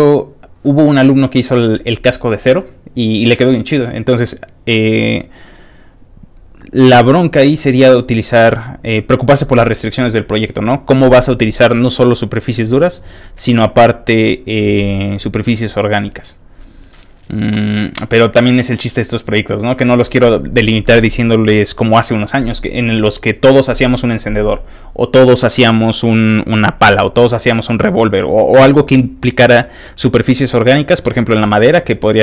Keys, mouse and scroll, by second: 8.3-15.1 scroll up 1, 15.1-17.8 scroll up 1, 17.8-19.0 scroll up 1, 19.0-32.2 scroll up 1.